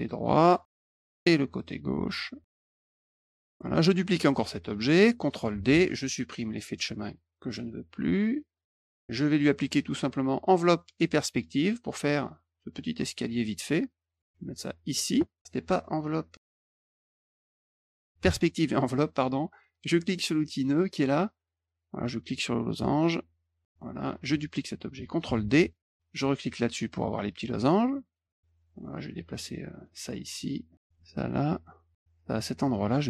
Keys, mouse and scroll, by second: 1.0 click, 2.6 click, 2.9 middle click, 3.4 click, 5.5 ctrl+d, 6.7 click, 8.0 click, 9.3 click, 11.0 click, 11.4 middle click, 13.1 middle click, 13.8 middle click, 14.2 click, 16.5 click, 16.7 click, 18.2 click, 20.6 click, 22.0-23.6 drag, 23.8 click, 25.2 ctrl+d, 26.2 click, 29.2 click, 30.7 click, 31.9 click, 32.6 middle click, 32.6-33.0 scroll up 3, 32.8 middle click, 32.9 middle click.